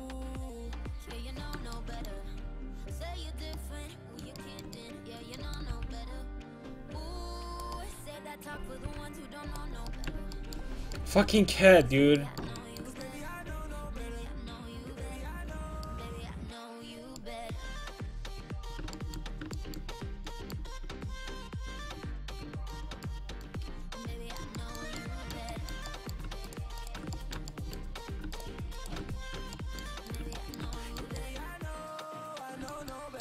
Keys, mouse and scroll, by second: 0.3 middle click, 2.5 g, 3.7 middle click, 4.3 middle click, 4.8 middle click, 5.8 g, 6.6 click, 8.9 g, 9.6 middle click, 13.7 middle click, 14.1 middle click, 15.9-17.0 middle drag, 17.3 middle click, 20.0-22.7 middle drag, 23.9 z, 26.5-28.7 right drag, 28.7-33.2 middle drag.